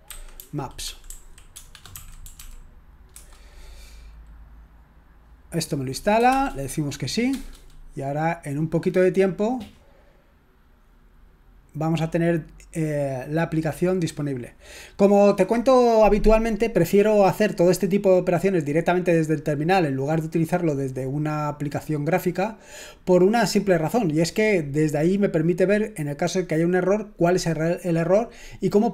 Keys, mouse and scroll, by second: 0.0-3.1 typing, 6.3 s, 7.3 Return.